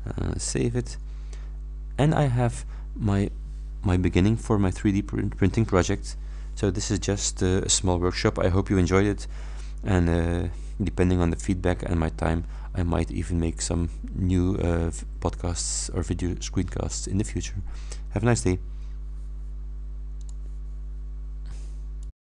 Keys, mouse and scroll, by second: 0.8 click, 20.3 click, 22.1 click.